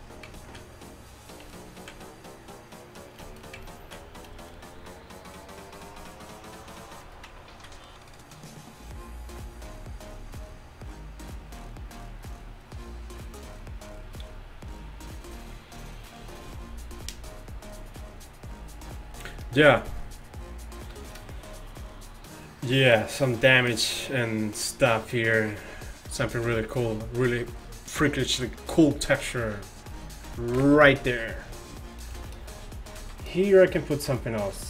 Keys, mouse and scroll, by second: 15.6-16.0 middle drag, 30.6 KP_1.